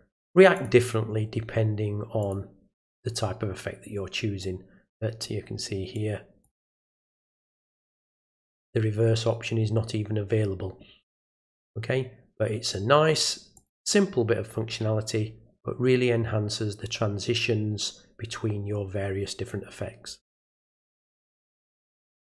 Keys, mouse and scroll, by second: 0.5 click, 2.2 click, 4.4 click, 5.9 click, 13.6 click, 22.2 click.